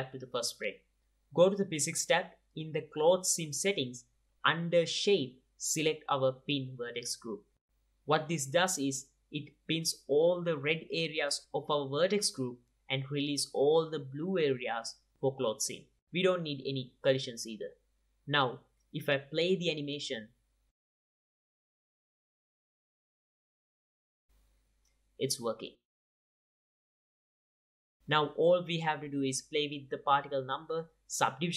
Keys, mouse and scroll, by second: 2.1 ctrl+Tab, 2.6 click, 4.1-4.4 drag, 6.7-10.8 drag, 11.9-18.5 drag, 18.8-20.0 drag, 20.2 click, 20.8 click, 23.8-24.8 drag, 27.6-28.6 drag, 28.6-29.0 middle drag, 29.1 middle drag, 30.6-31.5 drag.